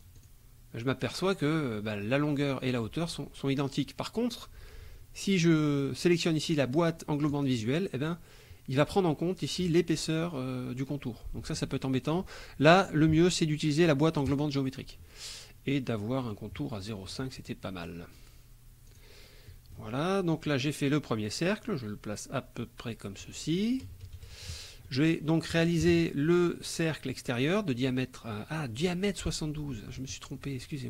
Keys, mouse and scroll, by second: 0.2 click, 7.3 click, 14.3 click, 16.3 right click, 17.1 click, 18.9 click, 19.5 middle click, 20.5-23.4 drag, 23.9 KP_Add, 24.1 KP_Subtract, 24.9 click, 25.8 KP_Subtract, 26.9 click, 29.8 click.